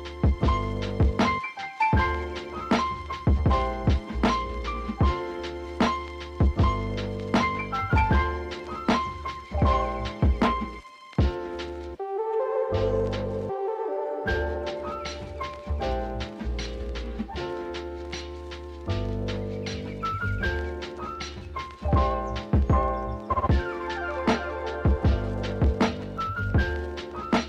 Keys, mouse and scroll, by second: 0.2 Tab, 1.4-4.3 drag, 4.4-5.9 drag, 6.7-7.7 drag, 7.7 g, 8.4-10.0 scroll down 5, 10.0-10.8 shift+middle drag, 10.8 Tab, 11.0 Tab, 11.1 click, 11.3 shift+click, 11.5 Tab, 12.0 ctrl+r, 13.4 ctrl+r, 14.2 alt+shift+click, 14.5 g, 15.7 ctrl+b, 17.3 s, 19.5 ctrl+z, 20.2 click, 20.5 Tab, 20.7 click, 20.9 Tab, 21.4 3, 21.7 alt+click, 22.1 s, 24.1 ctrl+z, 25.5-26.0 shift+middle drag, 26.0 ctrl+r.